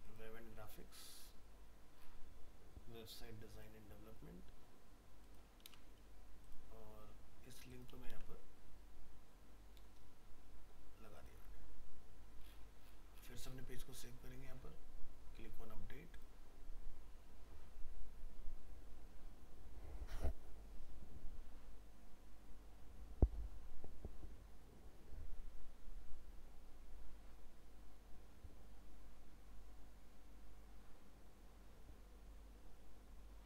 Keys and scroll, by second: 5.6 ctrl+c, 8.1 ctrl+v.